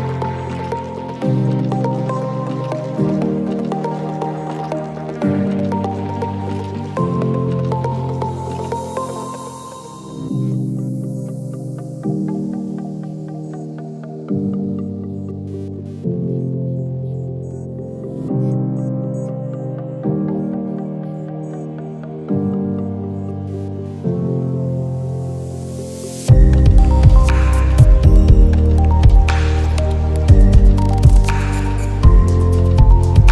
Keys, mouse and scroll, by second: 2.0-5.6 drag, 10.7 alt+scroll down 1, 10.9 space, 11.0 click, 11.3 space, 11.5 space, 12.8 click, 13.8 alt+scroll up 1, 14.3 click, 14.4 space, 15.6 click, 17.5 click, 19.3 shift+click, 21.3-33.2 drag.